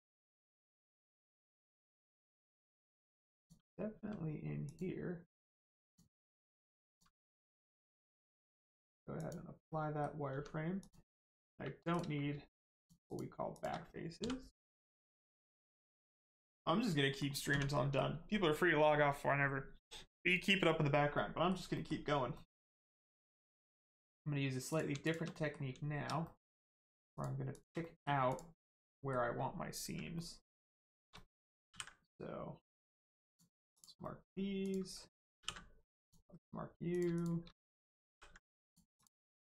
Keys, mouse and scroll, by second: 0.8 Tab, 2.2 right click, 3.4 click, 3.9 q, 4.6 click, 5.4 q, 5.8 click, 6.2 q, 6.8 click, 7.3 middle click, 9.1 click, 9.6 middle click, 10.3 Tab, 10.8 click, 12.8 shift+click, 13.0 shift+click, 13.5 shift+click, 14.2 x, 16.0 click, 16.4 middle click, 17.4 Tab, 17.7 middle click, 21.1 middle click, 22.0 Tab, 22.3 middle click, 22.8 click, 23.2-23.8 scroll up 1, 23.8-24.6 scroll down 1, 24.6 click, 25.0 shift+click, 25.3 middle click, 26.2 middle click, 26.6 click, 27.1 shift+click, 27.5 shift+click, 27.8 middle click, 28.2 click, 28.9 middle click, 30.1 middle click, 30.8 shift+click, 31.1 middle click, 31.2 middle click, 33.2 click, 34.0 middle click, 34.6 click, 35.4 ctrl+e, 36.0 click, 37.1 shift+click, 38.0 ctrl+e, 38.6 click, 39.3 middle click.